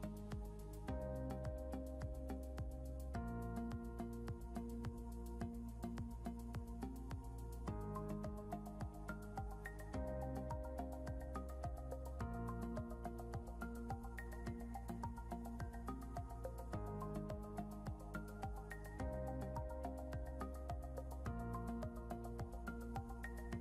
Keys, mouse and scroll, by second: 0.4 click, 3.4 Down, 6.1 click, 10.4 click, 11.2 scroll down 1, 12.0 scroll up 1, 12.2 scroll down 1, 12.8 click, 13.2 scroll up 1, 13.8 click, 17.1 click, 19.5 click, 21.7 click.